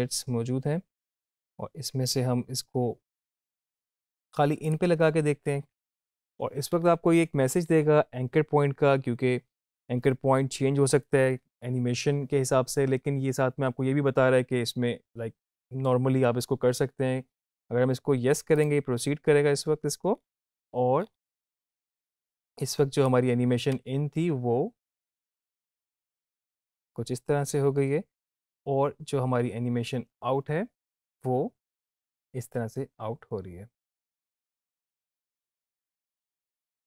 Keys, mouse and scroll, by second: 4.6 click, 18.5-23.3 drag, 23.7 space, 34.0 space, 34.5-36.7 drag.